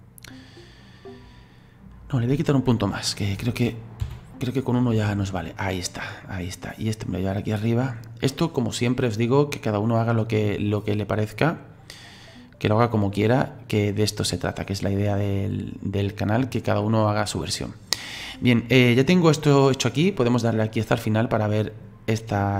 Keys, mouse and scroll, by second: 3.1 right click, 4.0 Delete, 5.3-7.1 middle drag, 7.1 right click, 9.2 click, 10.7 right click, 13.8-16.0 middle drag, 16.0 click, 16.8-19.8 middle drag, 20.4-22.3 drag, 22.3-22.5 middle drag.